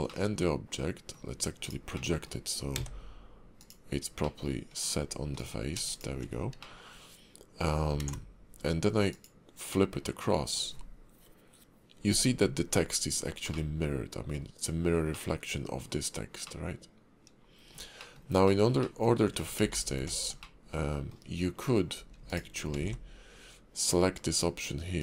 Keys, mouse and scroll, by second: 0.2 middle click, 1.6 click, 2.1 middle click, 2.5 scroll up 1, 2.7 d, 4.3 middle click, 4.8 click, 5.1 scroll up 2, 5.4 click, 5.9 shift+click, 6.4-6.7 scroll down 3, 6.7 middle click, 8.0 alt+x, 9.2 click, 9.8 middle click, 12.3-12.7 scroll up 2, 13.7 middle click, 15.3 middle click, 16.6 middle click, 17.9-18.3 scroll down 2, 18.1 shift+middle click, 18.6 middle click, 18.9 middle click, 19.6 scroll down 1, 19.7 ctrl+z, 20.1 ctrl+z, 20.5 middle click, 21.4 scroll up 1, 22.3 shift+click, 22.8 alt+x, 23.8 click.